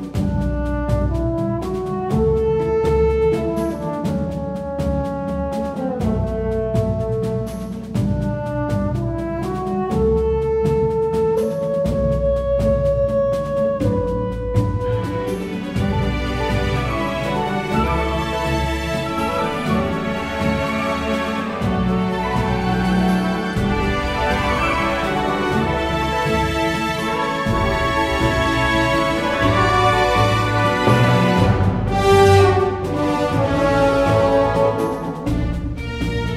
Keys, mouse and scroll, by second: 2.0-9.5 drag, 11.7 s, 14.7-16.0 drag, 14.7 g, 17.9-21.2 drag, 21.2 s, 23.7 middle click, 24.6 click, 25.2 KP_1, 32.4 click, 32.8 Tab, 34.8 alt+c.